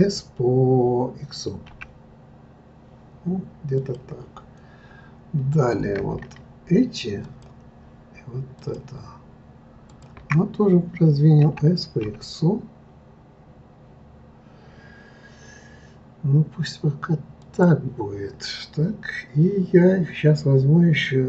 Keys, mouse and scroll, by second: 5.5 click, 7.2 shift+click, 8.6 shift+click, 9.9 shift+click, 11.4 s.